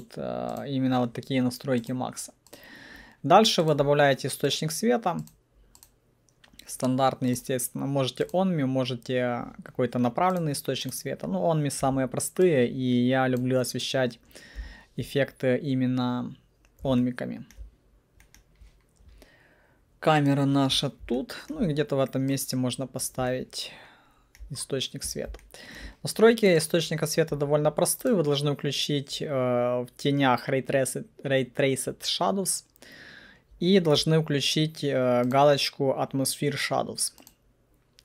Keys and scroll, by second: 11.9 w, 14.7 p.